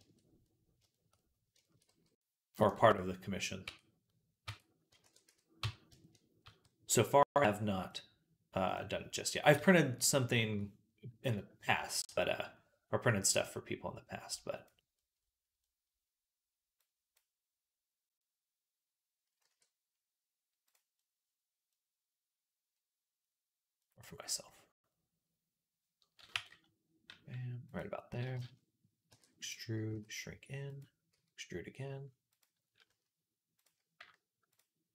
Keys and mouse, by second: 1.7 g, 3.5 Tab, 4.3 Tab, 4.9 ctrl+a, 5.5 Tab, 6.3 a, 7.1 a, 7.7-20.5 drag, 9.4 f, 19.3 e, 20.5-33.5 middle drag, 26.2 g, 28.9 e, 29.7 s, 31.0 e, 33.5 click, 34.4-34.9 alt+shift+middle drag.